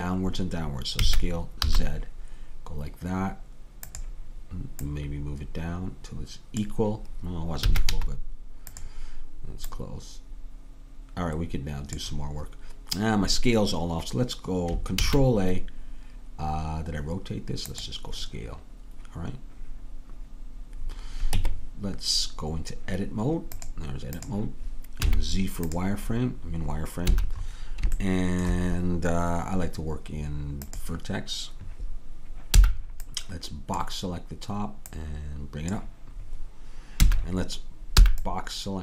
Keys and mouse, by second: 1.0 s, 4.9-6.7 drag, 7.7 s, 9.8-12.0 drag, 15.0 ctrl+a, 20.9-22.7 drag, 21.4 Tab, 23.6 click, 24.3 Tab, 25.1 z, 26.2-28.1 middle drag, 27.1 a, 30.6-32.6 drag, 32.6 b, 35.0-36.7 drag, 37.1 a, 38.0 b.